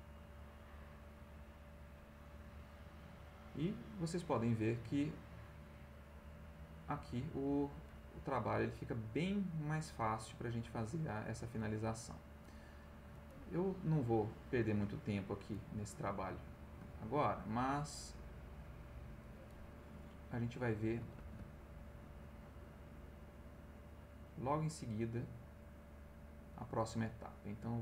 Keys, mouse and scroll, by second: 1.0-2.3 drag, 3.5 middle click, 3.9 middle click, 4.9-7.9 drag, 8.6-10.8 drag, 11.5 click, 12.6 middle click, 13.9-15.6 drag, 15.8 middle click, 16.4 ctrl+middle click, 17.9-19.2 drag, 20.2 click, 21.2 ctrl+z, 21.5-26.6 ctrl+drag, 27.4-27.8 drag.